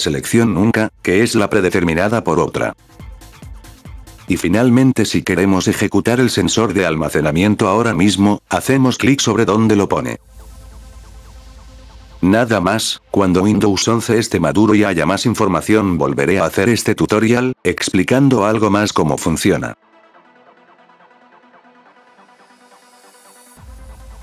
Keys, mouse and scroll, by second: 2.2 click, 3.4 click, 3.9 click, 4.4 click, 5.3 click, 12.9 click.